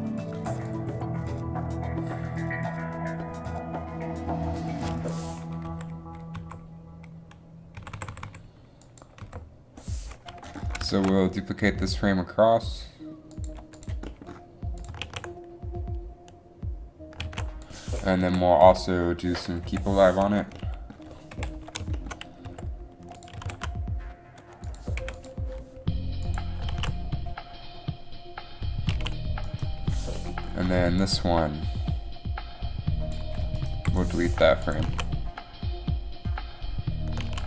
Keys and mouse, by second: 0.8 right click, 5.8 Down, 6.5 Up, 7.9-8.2 Left, 8.4 Left, 9.4 Right, 11.1 shift+d, 14.9 click, 15.1 alt+a, 17.4 alt+a, 18.3 Right, 18.8 Right, 19.7 KP_3, 21.5 KP_1, 22.6 r, 23.5 g, 25.4 i, 26.8 alt+a, 29.3 alt+a, 31.1 click, 34.1 Delete, 35.0 alt+a.